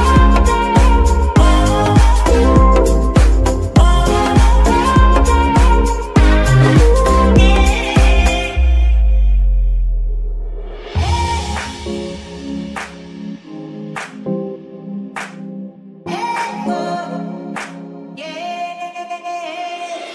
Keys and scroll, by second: 0.8 y, 2.0 g, 2.1 z, 3.2 KP_3, 3.9 g, 3.9 z, 13.7-15.4 typing, 16.5 n, 16.6 t, 16.9 Return.